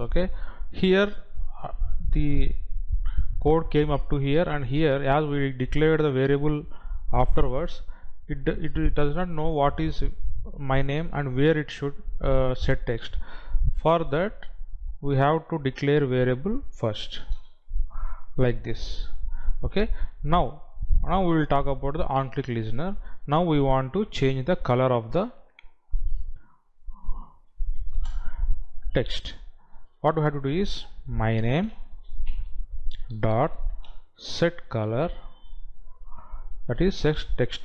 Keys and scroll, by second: 16.2 ctrl+x, 17.9 ctrl+v, 28.4 space, 36.5 Down.